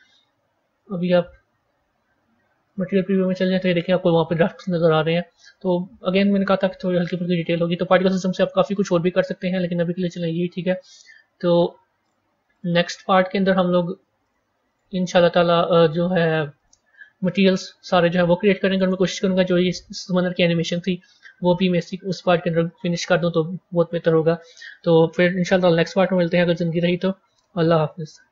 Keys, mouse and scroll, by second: 0.7 z, 3.5-6.5 middle drag, 6.5 a, 11.9-13.5 drag, 15.2-16.5 scroll up 1, 16.5-17.3 drag, 17.3-18.3 scroll down 4, 18.3-28.3 middle drag.